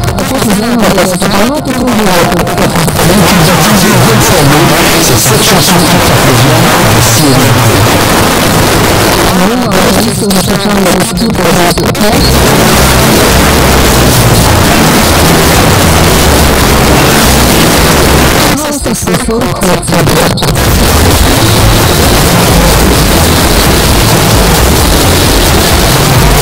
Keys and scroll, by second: 9.1 Page_Down, 18.3 Page_Down.